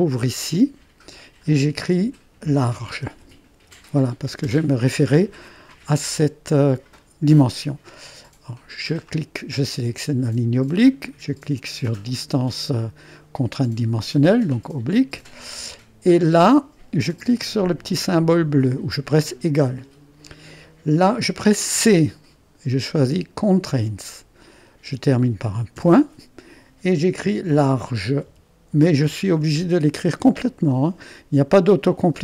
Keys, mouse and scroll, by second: 1.4-2.5 drag, 2.2-4.1 typing, 4.5 Return, 8.9-9.9 drag, 14.3-15.6 drag, 19.3-21.6 drag, 21.8 c, 23.6 click, 24.3 click, 25.8 ., 27.3-29.6 typing.